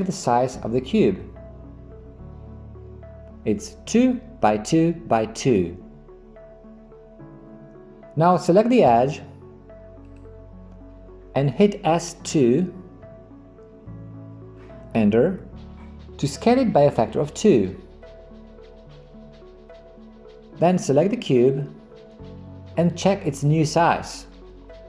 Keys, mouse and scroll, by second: 10.1 click, 12.3 s.